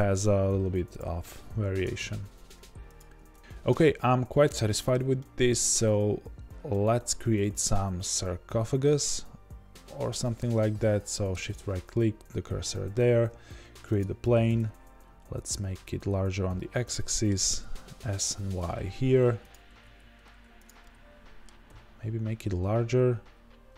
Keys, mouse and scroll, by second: 0.9 click, 1.6 ctrl+b, 3.1 Tab, 4.3-4.6 scroll down 2, 4.6-11.4 middle drag, 9.0-11.4 scroll down 2, 11.4 shift+right click, 11.9-23.7 middle drag, 14.0 shift+a, 14.4 Tab, 15.1 s, 17.6 s, 21.6 s.